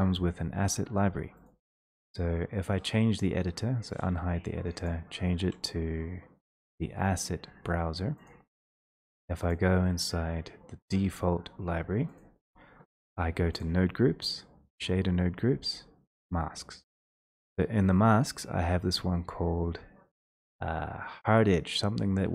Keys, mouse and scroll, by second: 1.5 middle click, 4.0 click, 4.9 click, 8.3 click, 9.5 click, 16.3 click.